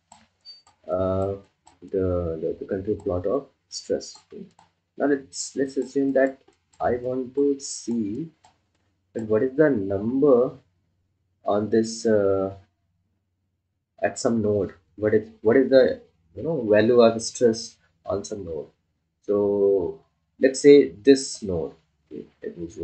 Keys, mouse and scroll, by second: 2.2-3.2 ctrl+alt+drag, 3.8 ctrl+alt+click, 4.5 click, 7.3-9.0 ctrl+alt+drag, 9.4 ctrl+click, 10.0-10.5 scroll down 2, 12.2-13.2 scroll up 1, 13.2-13.7 scroll down 1, 22.3 scroll down 1.